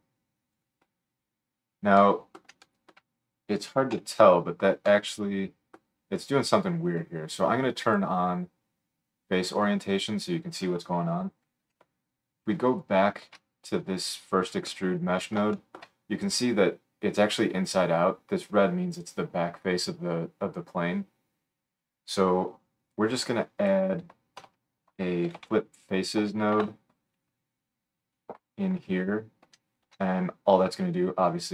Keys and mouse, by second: 3.9 KP_7, 12.7 alt+shift+middle click, 12.9-15.4 alt+shift+drag, 21.9-23.7 drag, 24.4 F3, 29.7 alt+shift+click.